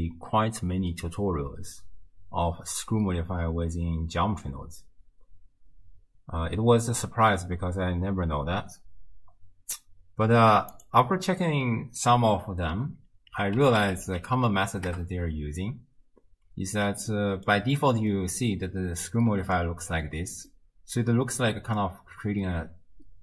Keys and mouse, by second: 10.9 click, 17.3 shift+click, 18.1-19.6 drag, 20.5-21.8 drag.